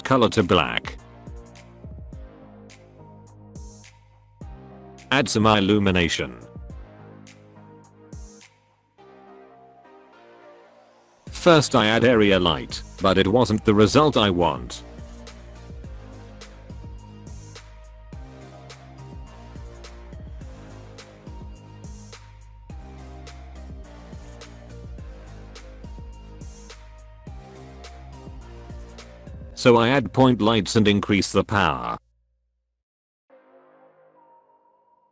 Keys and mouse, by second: 2.9-3.3 middle drag, 4.7 shift+a, 8.8 alt+middle drag, 10.2-14.0 typing, 11.1 middle click, 11.8 middle drag, 12.4 click, 13.4 click, 13.8 click, 14.9 middle click, 15.2 alt+middle click, 15.6-16.9 typing, 16.3 middle click, 16.6 click, 20.9 Delete, 21.0 middle click, 21.1 click, 21.2 Delete, 21.3 middle click, 21.3 KP_0, 24.0-25.2 drag, 25.5-26.6 drag, 28.0 alt+a, 28.4-28.7 middle drag, 29.6 shift+a, 33.5 g.